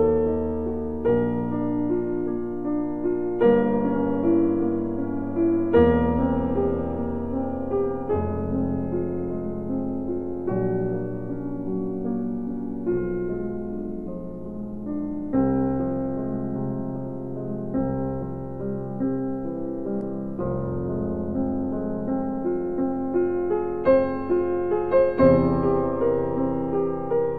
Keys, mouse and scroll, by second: 3.6 click, 3.6 click, 6.6 ctrl+Num_Lock, 6.6 click, 7.0 ctrl+r, 17.7 ctrl+r, 17.7-18.7 scroll up 1, 18.8 scroll, 19.2-19.6 scroll up 1, 20.0 scroll down 1, 20.1 scroll, 20.3-21.0 scroll, 21.0 scroll down 1, 21.3-22.2 scroll, 22.2-22.6 scroll down 1, 22.6 scroll up 1, 23.1-23.8 scroll, 25.2 scroll down 1, 25.2 2.